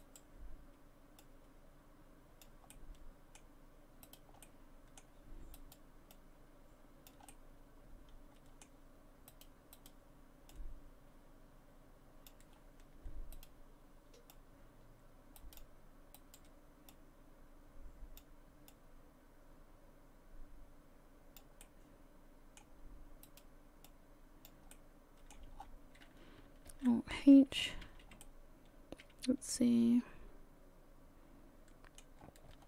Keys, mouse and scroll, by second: 0.0 right click, 1.2 click, 2.7 middle click, 4.1 right click, 4.4 middle click, 5.6 right click, 6.1 click, 7.3 middle click, 9.3 right click, 9.7 right click, 10.5 click, 12.5-13.3 scroll up 2, 13.3 right click, 14.3 click, 16.2 right click, 16.9 click, 18.7 click, 21.7 middle click, 23.3 right click, 23.9 click, 25.3 middle click, 25.3-25.7 scroll down 7, 26.7 alt+h, 27.6 a, 27.9 a, 28.2 middle click, 32.2-32.6 scroll up 3.